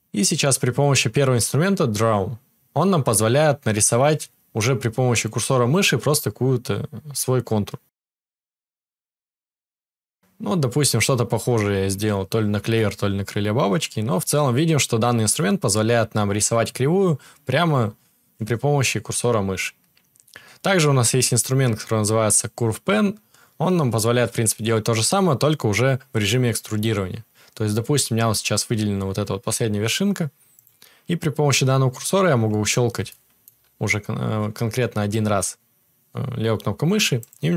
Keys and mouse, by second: 2.0-37.5 drag, 2.7 ctrl+z.